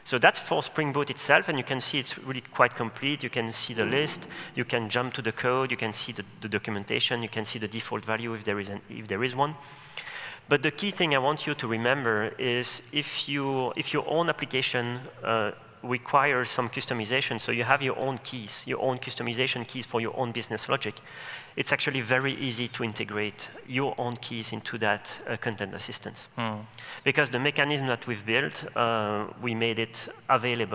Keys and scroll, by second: 4.2 F1, 9.2 super+b, 19.3 super+e.